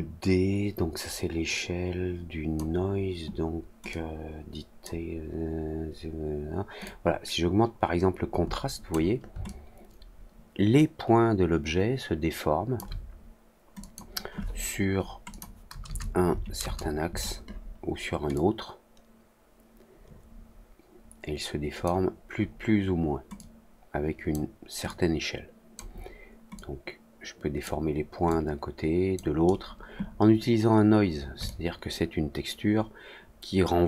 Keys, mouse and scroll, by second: 3.8 click, 6.8-8.8 drag, 9.4-12.7 alt+drag, 13.7 click, 15.2 click, 18.3-21.8 drag, 23.3 click, 24.8 click, 26.5-27.6 drag, 28.2 click, 31.4-33.8 alt+drag.